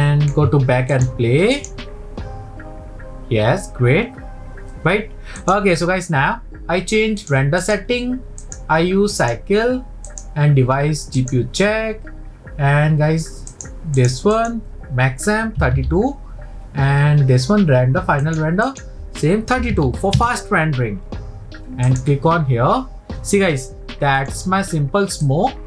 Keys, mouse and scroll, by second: 0.9-4.7 drag, 5.5-7.7 drag, 8.4-13.1 drag, 13.5 click, 14.3-17.5 drag, 18.7-21.7 drag, 23.6-25.2 middle drag, 25.2 click.